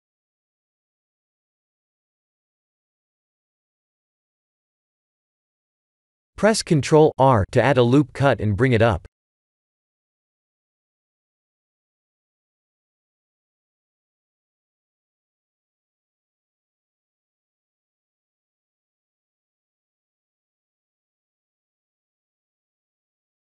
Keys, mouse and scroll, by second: 0.1 click, 3.1 s, 4.5 middle click, 5.9 middle click, 7.0 Tab, 7.4 ctrl+r, 14.3 Tab, 15.1 s, 18.7 middle click, 20.2 click, 23.0 KP_1.